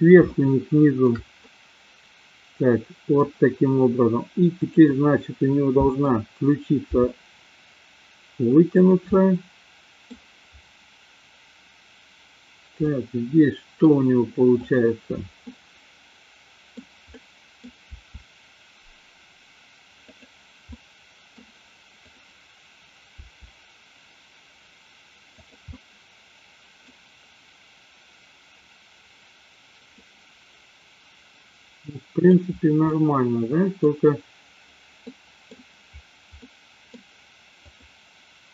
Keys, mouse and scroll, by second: 0.2 shift+middle click, 1.3-3.2 middle drag, 5.5 middle click, 7.0 r, 9.0 click, 9.1-10.2 middle drag, 13.0-14.0 middle drag, 14.6 click, 15.5-16.8 middle drag, 17.2-17.6 middle drag, 18.0 r, 20.7 middle click, 22.0 click, 23.2 r, 25.7-27.0 middle drag, 27.1 click, 30.0-32.5 middle drag, 32.8-34.0 middle drag, 35.1 middle click, 36.3 middle click, 37.6 click.